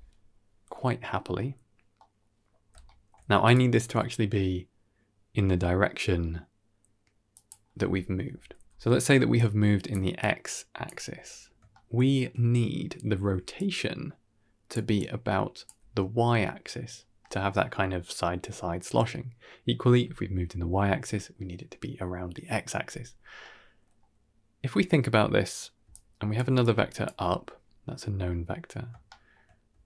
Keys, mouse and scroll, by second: 0.2 KP_1, 0.9 middle click, 1.9 middle click, 2.5 scroll up 3, 2.7 shift+middle drag, 3.3 click, 3.7 g, 8.0 middle click, 8.0 click, 8.0-9.0 scroll up 2, 9.0 middle click, 9.0 d, 9.2-9.8 drag, 9.8 d, 10.1 click, 10.7 d, 11.4 d, 11.6 shift+middle click, 13.2 d, 13.4-14.6 drag, 14.6 d, 14.8 click, 14.8 d, 15.5 d, 16.4 d, 23.3-23.9 middle drag, 25.7 d, 25.8 click, 26.3 d, 26.5 click, 26.5 d, 26.9 d, 28.8 d, 29.0 shift+middle drag, 29.6 d, 29.7 right click.